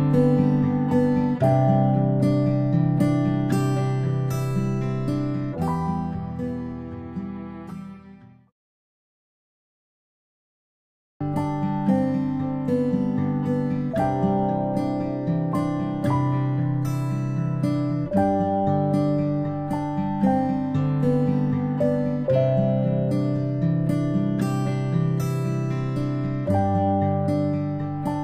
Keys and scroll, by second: 4.7 ctrl+z, 5.0 space, 6.0 ctrl+z, 6.3 ctrl+z, 9.3 ctrl+z, 20.4-20.7 space, 21.0 ctrl+z, 21.2 ctrl+z.